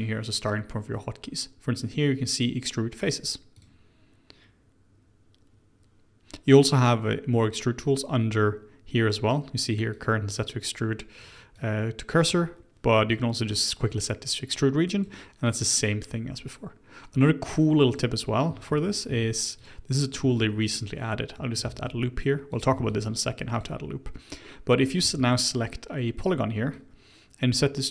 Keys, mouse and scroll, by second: 3.5 click, 7.8-14.7 drag, 15.4 click, 16.7 scroll down 1, 17.5-17.9 scroll up 1, 17.9 click, 18.4-19.1 scroll down 1, 19.1 q, 19.6 click, 20.3 ctrl+e, 21.6 ctrl+r, 22.7 ctrl+r, 25.0 3, 25.2 click, 26.7-27.9 drag.